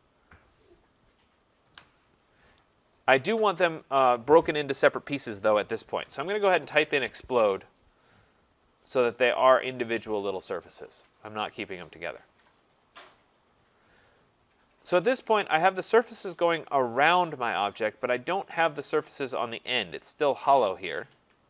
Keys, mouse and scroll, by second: 0.9 Return, 1.6 Return, 2.9 click, 5.8-8.5 typing, 7.9 click, 8.6 click, 9.3 click, 9.9 click, 13.4-14.0 scroll, 15.3 right click, 17.9 scroll, 18.8 right click, 19.2-19.7 scroll.